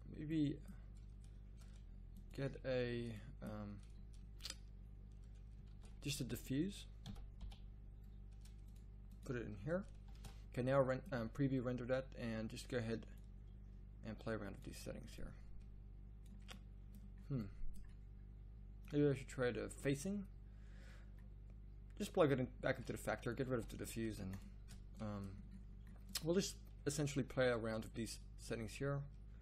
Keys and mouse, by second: 3.3-4.6 drag, 4.7-6.0 drag, 10.0 click, 10.3 shift+z, 14.2-16.7 drag, 16.8-22.0 drag, 23.5 x.